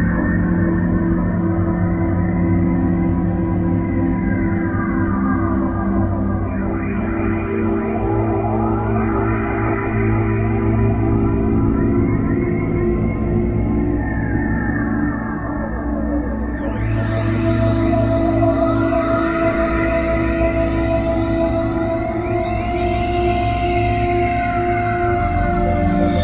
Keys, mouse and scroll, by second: 8.0 Escape, 13.5 click, 25.9 Escape.